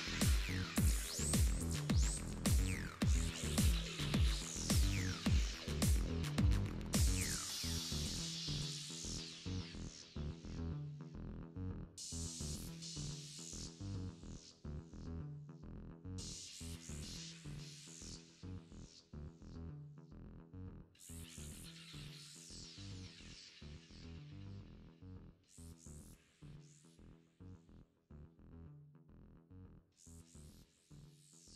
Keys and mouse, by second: 0.0 o, 0.3-1.5 drag, 1.8 KP_7, 3.3 KP_7, 3.8 s, 6.5 s, 13.0 s, 20.6 Tab, 21.6 right click, 22.6-25.5 middle drag, 27.0-28.2 drag, 28.2-29.4 middle drag, 29.4-31.5 drag.